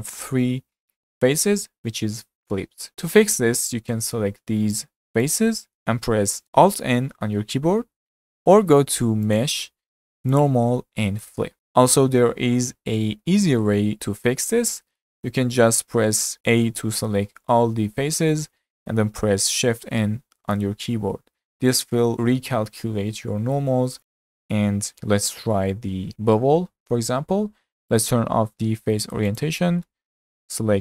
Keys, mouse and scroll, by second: 4.1 3, 4.8 click, 5.3 shift+click, 7.0 alt+n, 9.3-11.5 drag, 11.5-13.2 middle drag, 13.2 ctrl+z, 14.7-16.5 middle drag, 16.5 a, 20.4 shift+n, 25.3 Tab, 26.0 Tab, 27.9-29.9 drag, 29.9-30.8 middle drag.